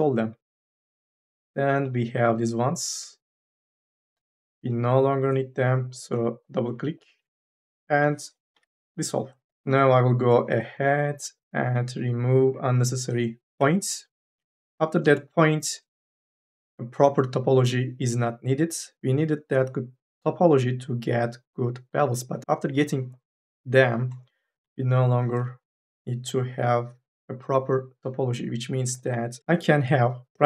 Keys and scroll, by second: 8.3 m, 8.6 n, 10.6 1, 11.1 3, 11.5 2, 11.9 1, 28.6 m, 29.1 e.